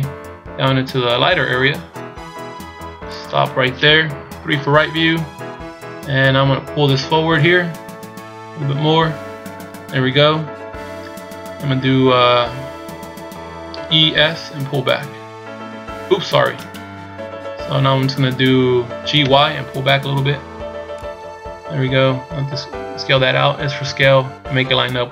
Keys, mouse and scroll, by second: 4.2 KP_3, 7.4 click, 13.7 e, 19.0 g, 21.6-22.6 scroll up 4, 23.8 s.